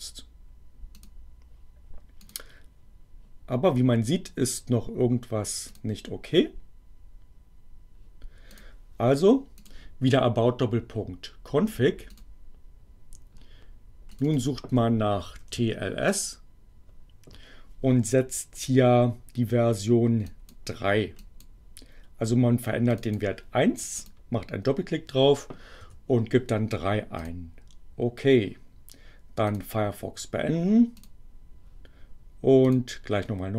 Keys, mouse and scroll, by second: 0.9 click, 2.2 click, 5.6 click, 8.5 click, 9.6 click, 12.0 click, 14.1 click, 15.0-16.0 typing, 20.1 click, 21.1 click, 22.9 click, 23.9 click, 25.8 3, 27.2 click, 29.5 click, 30.9 click, 32.7 click.